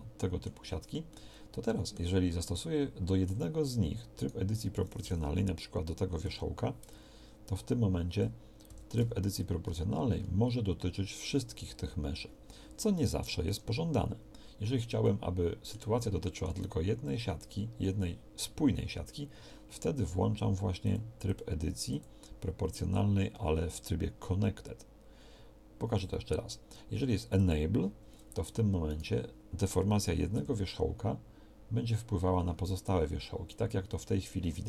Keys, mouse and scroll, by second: 6.3 o, 8.7 g, 30.4 g.